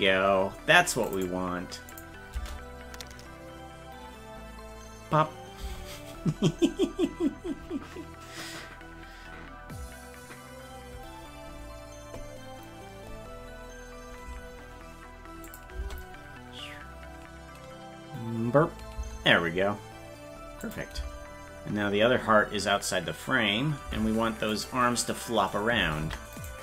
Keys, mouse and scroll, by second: 1.1 click, 1.9 click, 2.3 space, 15.5 click, 15.8 space, 20.7 click, 21.0 space, 24.5 right click, 26.0 ctrl+Tab, 26.4 right click.